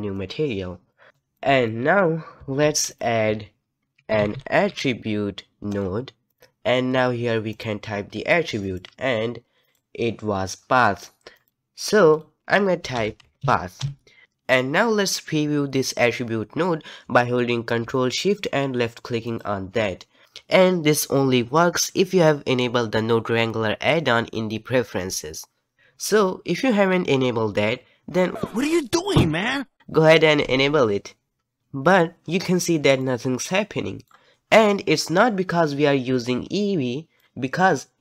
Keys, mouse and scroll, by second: 0.3-1.1 drag, 1.1-8.8 middle drag, 10.5-19.3 middle drag, 19.3 ctrl+shift+click, 29.7 ctrl+shift+click, 33.0-36.6 middle drag, 37.2-38.0 middle drag, 37.2 z.